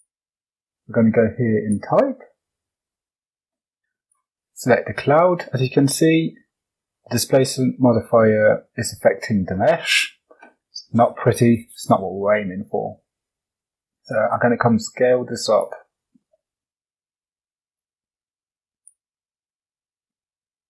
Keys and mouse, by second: 1.5-4.2 drag, 5.5-6.2 middle drag, 7.4 middle click, 8.1-8.8 middle drag, 9.6 middle click, 11.2-11.6 middle drag, 13.9-15.6 drag, 16.1 middle click, 17.7-18.8 drag, 19.4-20.6 drag.